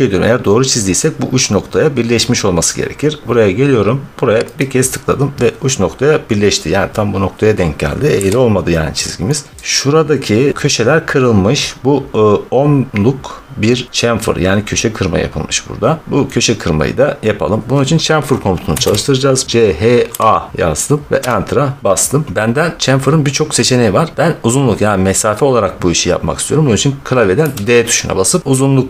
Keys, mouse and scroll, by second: 3.0-3.3 scroll, 4.2 scroll, 4.5 click, 8.0 Escape, 9.1-10.5 scroll, 15.7-17.2 scroll, 18.6 typing, 18.9-19.3 scroll, 20.1 a, 21.1 Return, 27.3 d, 28.4 Return.